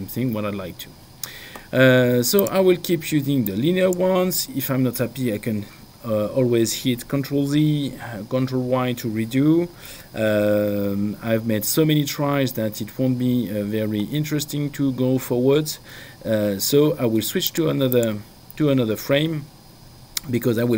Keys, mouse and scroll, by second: 2.4 click, 9.9 ctrl+y, 17.5 click.